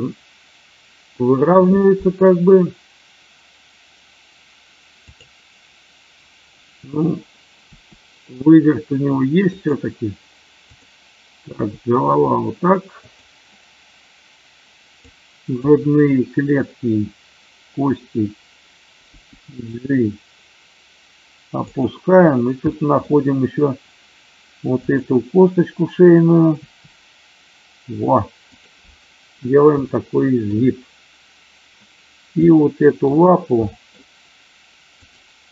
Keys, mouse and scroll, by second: 4.9 click, 7.7 r, 9.5 click, 10.7 click, 11.3 r, 13.0 click, 14.9 click, 19.1 g, 21.6 click, 22.7 shift+middle click, 24.8 click, 26.6 r, 28.6 click, 30.0-30.3 shift+middle drag, 32.5-33.8 middle drag, 35.0 click.